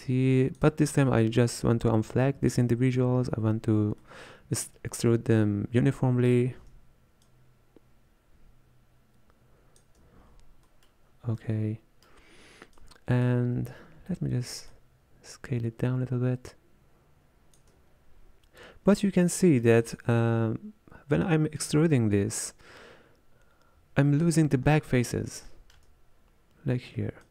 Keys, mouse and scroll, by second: 4.0-7.5 middle drag, 7.5-11.4 shift+drag, 11.4-12.8 middle drag, 12.8-19.1 drag, 19.1-21.6 shift+middle drag, 21.6-24.6 drag, 24.6-25.5 scroll up 5, 25.5-27.3 shift+middle drag.